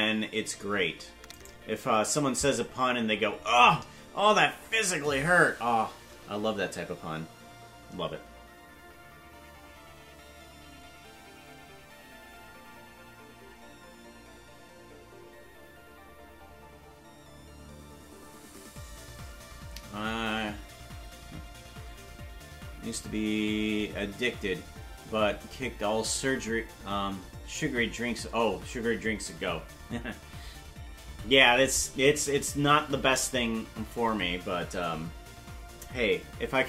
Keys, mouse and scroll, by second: 0.1 right click, 1.5 shift+right click.